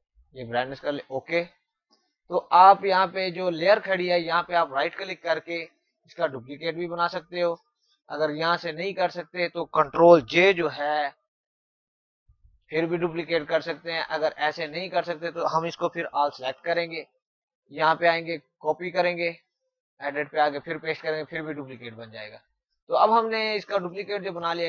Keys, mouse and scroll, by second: 4.1 right click, 6.4 click, 10.2 ctrl+Num_Lock, 15.7 ctrl+Num_Lock, 16.1 ctrl+a, 17.5 click, 21.8 click.